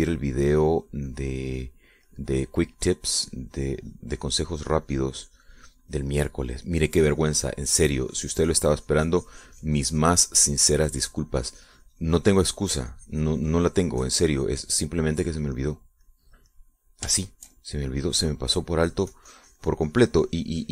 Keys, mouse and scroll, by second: 1.0-2.4 middle drag, 2.4 click, 3.9 middle click, 4.0-7.3 drag, 7.3 middle click, 7.5 click, 8.0-11.9 drag, 12.0-16.6 drag, 16.8-19.8 middle drag, 20.1-20.7 drag.